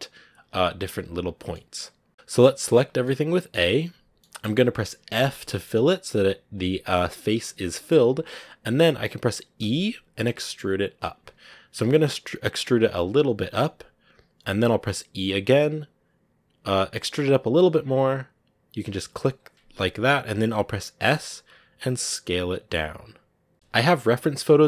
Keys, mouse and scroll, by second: 1.4-2.5 middle drag, 2.5 a, 2.9 middle click, 3.6-5.0 scroll up 2, 5.0 f, 5.3-6.4 middle drag, 6.4 scroll up 1, 7.6-9.5 middle drag, 9.5 e.